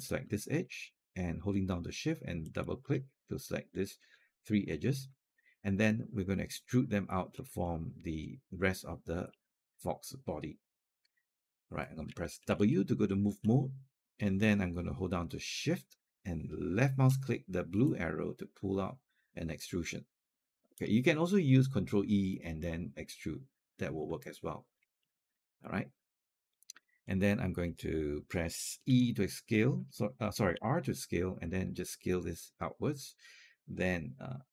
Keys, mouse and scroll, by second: 2.2 shift+click, 2.6 shift+click, 4.0-4.5 scroll up 1, 4.5-4.9 scroll down 1, 5.1 alt+middle click, 7.1 scroll down 1, 7.4 alt+middle click, 7.7 alt+middle click, 9.1 alt+middle click, 12.3 w, 17.6-20.6 shift+drag, 24.4 alt+click, 24.8 alt+middle click, 25.5-26.9 alt+drag, 28.7 e, 30.3 r, 31.3-34.5 drag.